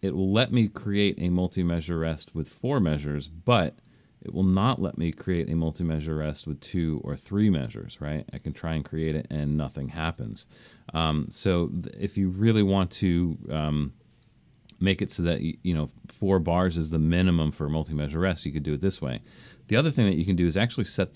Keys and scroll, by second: 3.0 super+z, 15.1 alt+super+a, 20.4 1.